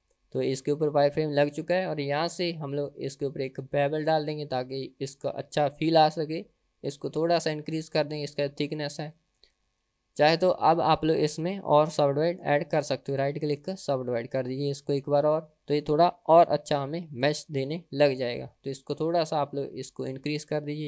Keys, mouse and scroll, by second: 0.0 scroll up 3, 0.6 click, 4.7 click, 7.1-9.2 drag, 10.0 ctrl+z, 11.0 click, 11.9 Tab, 12.7-14.0 right drag, 15.8 Tab, 16.8 click, 20.0 click.